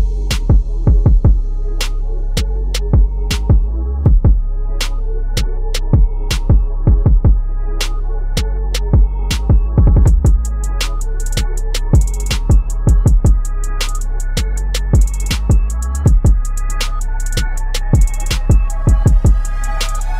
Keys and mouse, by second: 0.4 click, 3.5 click, 7.2-8.9 typing, 12.6-19.4 drag, 19.4 shift+Up.